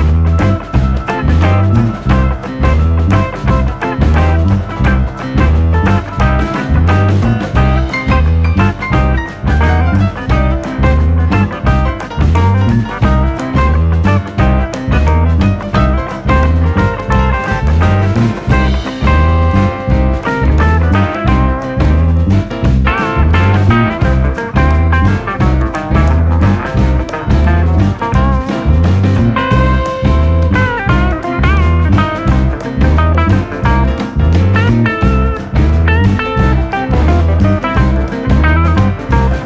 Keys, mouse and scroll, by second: 0.2 a, 1.3 shift+d, 2.0 r, 3.5 click, 5.8 KP_3, 6.1 KP_1, 6.4-6.7 scroll up 1, 6.7 click, 7.3 scroll up 1, 7.5 shift+middle click, 7.9-8.2 scroll up 1, 8.2 click, 11.1 r, 13.0 click, 13.8 scroll down 1, 14.1 middle click, 14.5 KP_3, 14.7-15.1 scroll up 4, 15.1 shift+middle click, 17.3 click, 17.5 scroll down 1, 17.7-18.8 middle drag, 18.8 KP_3, 19.0-19.4 scroll up 3, 19.4-20.4 drag, 22.4 f, 23.1 ctrl+z, 23.5 s, 26.2 r, 27.0-28.0 drag, 28.8-29.8 drag, 30.2-30.6 scroll up 1, 30.6-31.6 drag, 31.6-32.7 drag, 32.8 ctrl+z, 32.9 ctrl+z, 33.8 ctrl+shift+z, 34.6 s, 36.4 s, 37.2 r, 38.3 g.